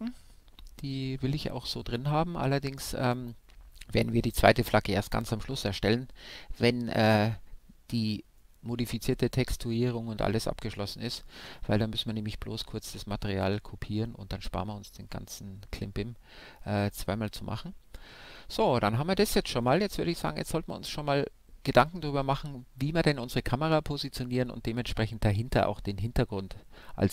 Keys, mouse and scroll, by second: 0.6-11.3 middle drag, 12.4-18.2 middle drag.